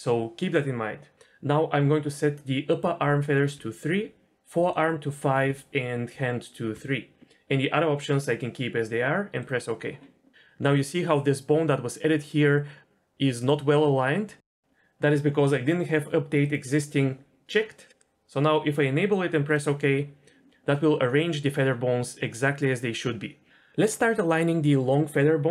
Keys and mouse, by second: 14.5-19.6 drag.